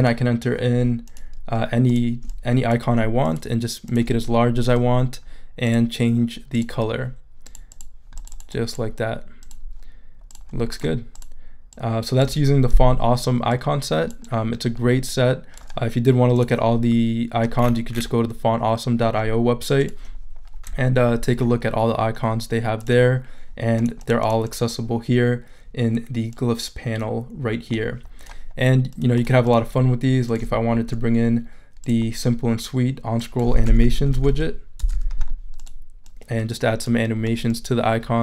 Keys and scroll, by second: 33.4-34.9 typing.